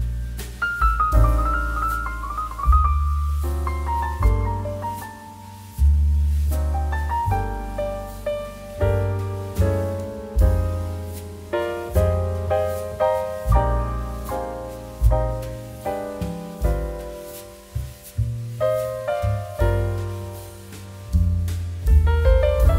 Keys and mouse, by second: 1.0 ctrl+z, 3.6 right click, 3.8 click, 4.2 right click, 4.5 click, 10.2 g, 11.1 click, 13.0 g, 13.3 shift+z, 14.2 click, 14.4 g, 15.2 click, 16.6 g, 17.4 click, 18.2 right click, 18.3 click, 18.7 right click, 18.9 click, 22.4 click.